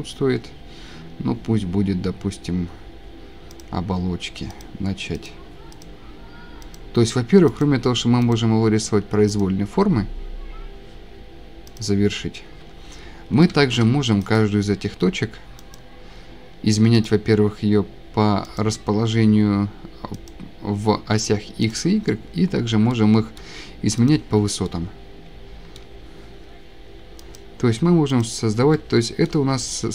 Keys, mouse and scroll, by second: 0.3 scroll, 2.4-2.9 scroll, 3.6 click, 4.6 click, 5.3 click, 5.3 scroll down 5, 5.8 click, 6.8-7.3 scroll, 7.6-8.3 scroll, 8.4 scroll, 9.4-10.4 click, 11.8 click, 12.7 Escape, 13.1-13.8 scroll, 14.4 click, 15.8 click, 17.1 click, 18.6 click, 20.3 click, 21.7 click, 23.3 click, 23.3 click, 24.1 click, 24.5 scroll down 2, 24.6 scroll, 25.1 click, 25.4 shift+middle click, 25.8 click, 27.4 click, 28.2 click, 28.3 shift+scroll, 29.2 shift+scroll, 29.3 click.